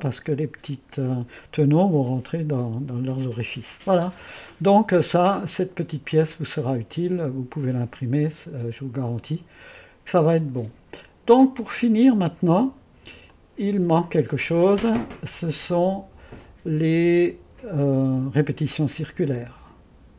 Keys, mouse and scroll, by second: 5.0 click, 7.8-10.3 drag, 10.3-12.0 scroll down 1, 13.4-16.7 drag, 13.8 space, 19.6 click.